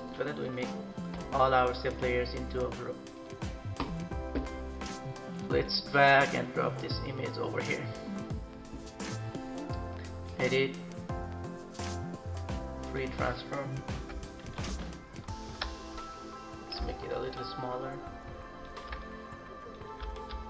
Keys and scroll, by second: 14.2 ctrl+-.